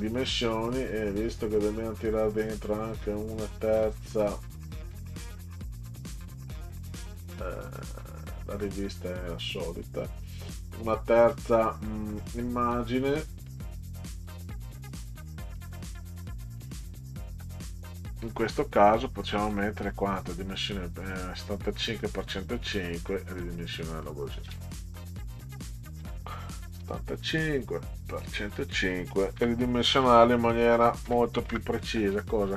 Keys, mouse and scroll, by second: 4.9 click, 5.4 scroll down 2, 7.6 scroll up 2, 8.4 click, 11.2 click, 12.8 click, 13.5 click, 14.2 click, 14.5 click, 15.5 click, 16.6 click, 18.4 click, 19.8 click, 22.3 click, 24.0 click, 26.0 7, 26.8 5, 28.0 click, 29.4 1, 30.0 0, 31.1 5, 31.5 Return.